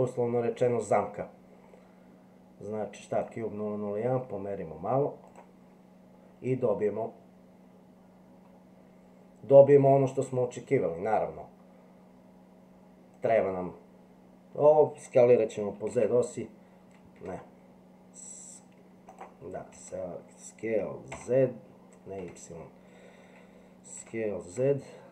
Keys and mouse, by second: 13.1 click, 15.7 s, 15.9 z, 19.1 click, 19.7 s, 23.9 s.